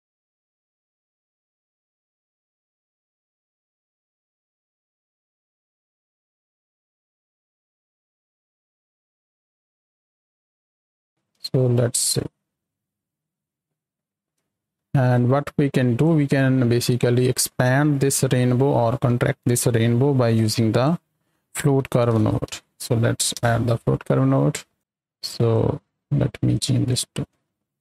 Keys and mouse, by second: 1.7 click, 3.3 KP_0, 4.5 click, 4.7 click, 4.9 drag, 5.3 click, 6.0-6.4 drag, 6.7-7.3 drag, 7.6 drag, 9.6-10.2 drag, 10.3 click, 10.8 middle click, 11.0 space, 12.1 click, 14.1 space, 14.7 click, 15.0 click, 20.3-20.8 drag, 25.2 click, 26.5 click, 27.3 click.